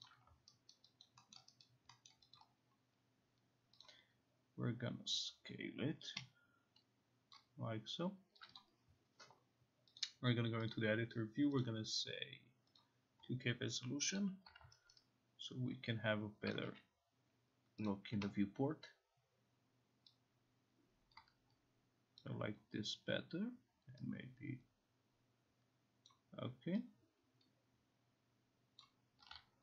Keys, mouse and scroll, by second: 0.1 click, 0.7 alt+right click, 1.4 alt+middle click, 1.7 alt+right click, 2.1 alt+middle click, 2.4 alt+click, 3.9 click, 7.4 click, 8.5 click, 8.6 click, 10.0 click, 10.7 click, 11.7 click, 12.8 click, 14.9 alt+right click, 14.9 click, 16.6 click, 16.7 e, 17.9 click, 22.2 click, 26.1 click, 28.9 click.